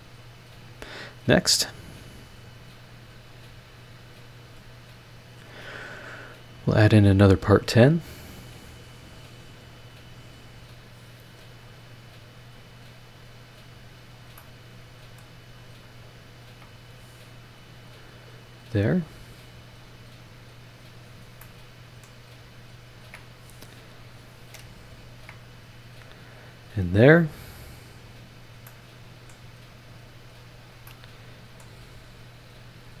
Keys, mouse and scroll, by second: 0.6 click, 2.8 click, 3.1-3.8 scroll down 4, 4.2 scroll up 2, 5.1 scroll up 2, 7.2 click, 9.9 click, 10.8 click, 11.3 scroll down 2, 11.6 scroll up 2, 13.0 click, 13.8 click, 14.1 scroll down 2, 14.4-15.4 middle drag, 14.4 click, 15.4-15.9 scroll up 3, 16.4 ctrl+click, 17.7 click, 18.5-18.8 scroll down 2, 19.7 click, 21.0 click, 21.4 middle click, 22.4 click, 23.0 ctrl+click, 25.0 ctrl+click, 26.3 click, 28.2 click, 28.7-29.5 middle drag, 29.6-30.1 scroll up 4, 30.6 click, 30.8 right click, 31.8 scroll down 2, 32.4-32.7 scroll up 2, 32.9 ctrl+click.